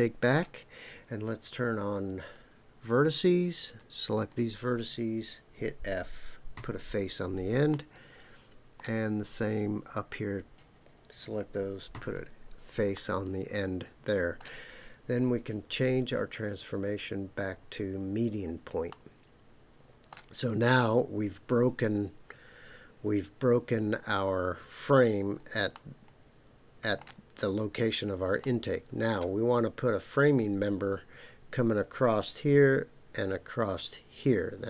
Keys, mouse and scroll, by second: 2.2 click, 3.8 click, 6.5 f, 7.7-8.8 middle drag, 9.5 click, 11.9 f, 12.9-14.4 middle drag, 16.0-18.3 drag, 18.9-20.1 middle drag, 25.7-27.0 middle drag, 28.4 middle click.